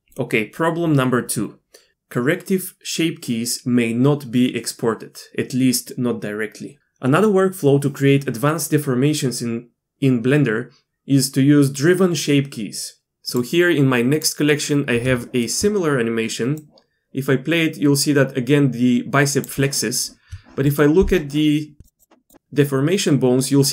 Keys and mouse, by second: 13.3-15.1 drag, 15.2 shift+middle click, 16.6-19.4 drag, 20.7 middle click, 22.0-23.1 drag.